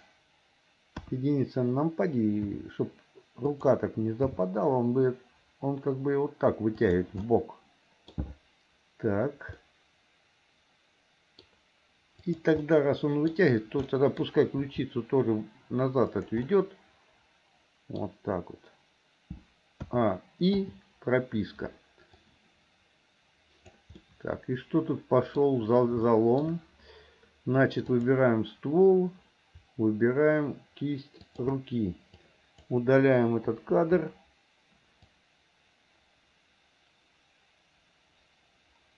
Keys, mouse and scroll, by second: 1.0 KP_1, 2.5 r, 4.2 g, 7.3 middle click, 9.6-11.4 middle drag, 12.3 click, 12.6 middle click, 13.9 middle click, 14.6 r, 16.5-18.1 middle drag, 19.9 a, 20.6 i, 22.3-23.9 drag, 24.0-25.4 middle drag, 26.0 shift+middle click, 27.9 click, 31.3 shift+click, 32.2 click, 33.6 Delete, 35.2-38.9 drag.